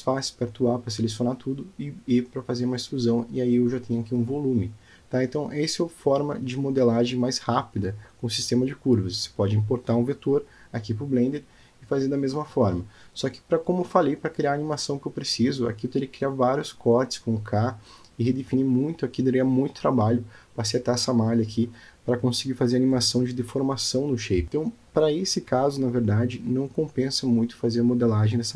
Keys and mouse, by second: 1.0 click, 2.3 middle click, 3.3 e, 6.4 click, 8.8-10.3 middle drag, 12.3 k, 20.6-21.6 middle drag, 22.2 click, 26.1 Tab, 27.0 click.